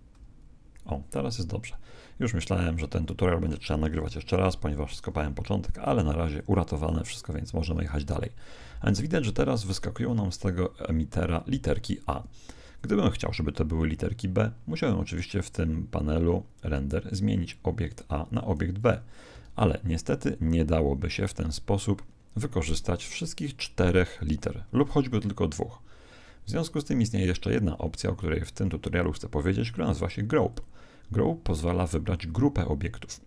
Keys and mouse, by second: 4.2 Escape, 4.5 KP_1, 6.4 click, 7.4 alt+a, 9.0-10.9 middle drag, 12.6 Escape, 14.4-16.5 middle drag, 17.9 click, 19.4 alt+a, 26.0 Escape, 30.5 click.